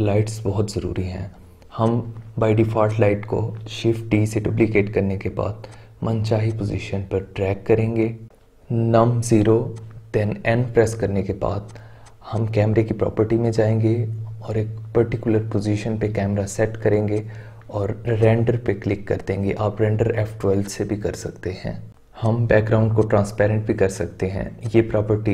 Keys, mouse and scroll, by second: 0.6 shift+d, 1.1-1.8 middle drag, 1.8-3.4 drag, 3.4 middle click, 3.5-4.1 right drag, 4.1-5.0 middle drag, 5.0 shift+d, 5.6-6.9 drag, 6.9-7.5 middle drag, 7.5 KP_0, 8.6 n, 9.7 click, 11.6 click, 12.0 click, 12.2 click, 13.4-14.2 scroll down 2, 14.2-16.4 middle drag, 17.1-18.5 drag, 20.6 click, 22.2-22.5 drag, 22.5-23.0 scroll down 2, 23.0 click, 23.9-25.3 drag.